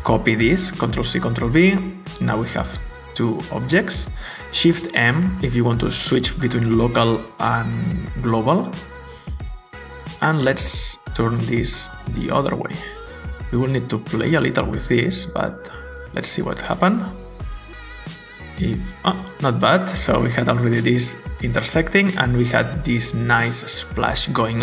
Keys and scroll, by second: 2.3 w, 5.0 m, 9.9 e.